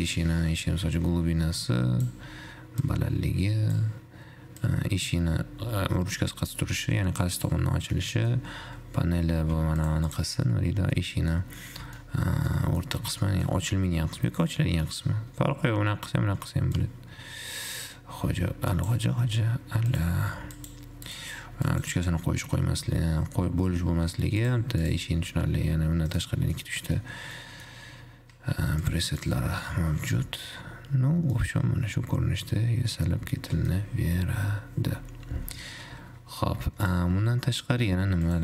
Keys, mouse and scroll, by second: 0.3-7.8 shift+drag, 8.3-10.0 middle drag, 10.0 click, 10.9 alt+z, 11.2-13.0 middle drag, 13.0 scroll up 2, 13.3-13.8 middle drag, 13.8-15.3 scroll up 2, 15.3-17.2 middle drag, 17.2-24.3 shift+drag, 25.2-26.4 drag, 26.8-27.3 middle drag, 27.3-27.8 scroll down 1, 27.8 middle click, 27.9-29.1 scroll down 2, 29.1 click, 30.8 scroll up 3, 31.0-31.8 scroll down 1, 31.8-34.8 middle drag, 36.2-37.2 scroll down 7, 37.2 click.